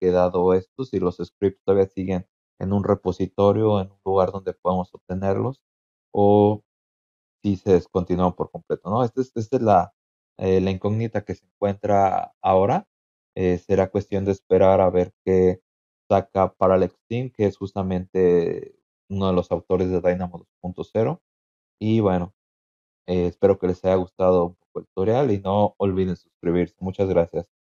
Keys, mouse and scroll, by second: 0.3 click.